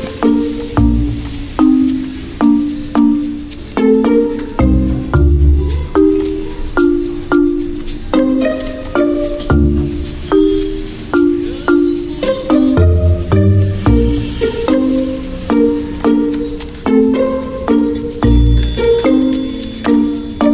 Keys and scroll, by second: 3.7 alt+Tab, 7.3 alt+Tab, 15.2 alt+Tab.